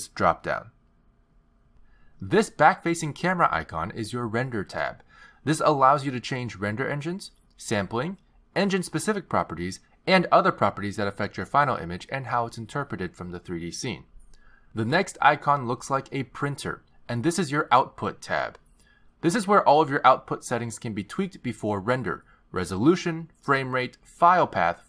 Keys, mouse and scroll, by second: 0.3 click, 1.4 click, 2.6 click, 17.7 click, 22.3-23.3 scroll down 4, 23.3 scroll down 2.